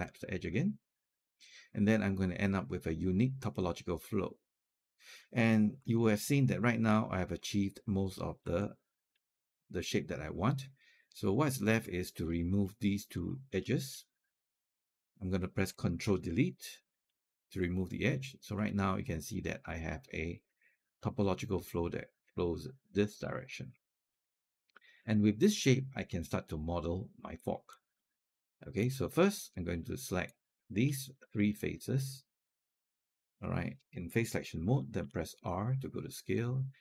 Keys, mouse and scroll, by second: 5.5 scroll down 1, 5.8 alt+click, 8.4 alt+click, 9.2-11.2 scroll up 1, 12.0 click, 13.0 shift+click, 16.9 ctrl+Delete, 18.4 right click, 19.5 click, 20.0 shift+click, 24.1 alt+click, 24.9 click, 26.0-27.5 alt+drag, 27.8 alt+click, 29.3 right click, 30.4 click, 31.0 shift+click, 31.3 shift+click, 34.8 r, 36.1-36.8 drag.